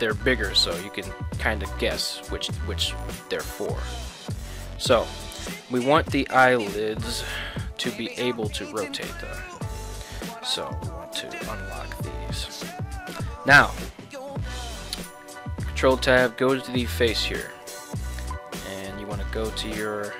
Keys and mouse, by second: 1.9 g, 3.3 right drag, 3.9 right click, 3.9 g, 4.5 right drag, 5.6 middle click, 6.9 KP_1, 8.8-9.5 drag, 10.8 right click, 12.0 click, 15.5 ctrl+Tab, 15.8 right click, 17.7 click.